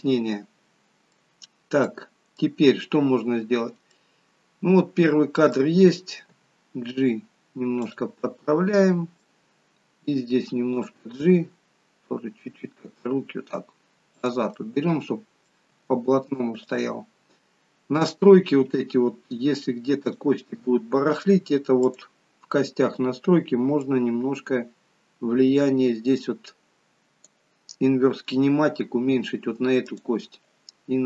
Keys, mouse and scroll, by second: 1.4-1.8 scroll up 1, 1.8 middle click, 3.8 middle click, 6.4 g, 8.2 middle click, 10.7 click, 11.3 g, 14.4 middle click, 15.7 g, 18.1 click, 20.0 click, 23.7 click, 29.9 click.